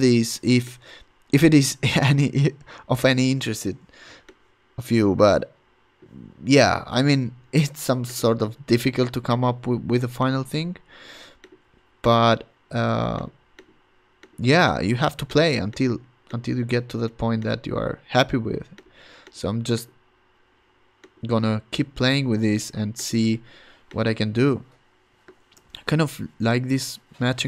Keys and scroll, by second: 0.1 super+t, 3.3 Return, 3.8 Return, 25.7 super+t.